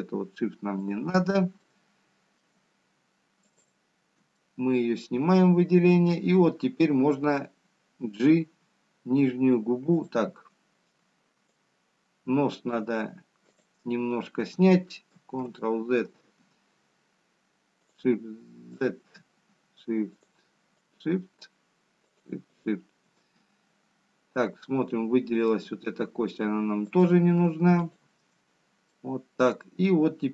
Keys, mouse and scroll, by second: 0.1 shift+click, 0.1 middle click, 3.0 shift+click, 3.9 middle click, 5.8 shift+click, 13.7 shift+click, 16.1 click, 18.1 ctrl+z, 20.4 shift+click, 21.4 shift+click, 23.4 shift+click, 25.7 shift+click, 27.3 middle click, 29.6 shift+click.